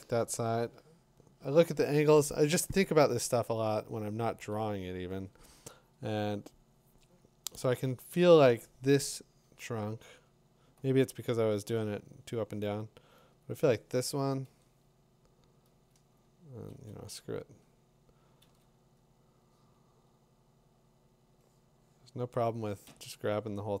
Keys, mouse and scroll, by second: 3.4 ctrl+z, 3.9 ctrl+z, 4.5 ctrl+z, 13.4 click, 14.5-16.4 drag, 17.4 l, 18.4 l, 22.9 v.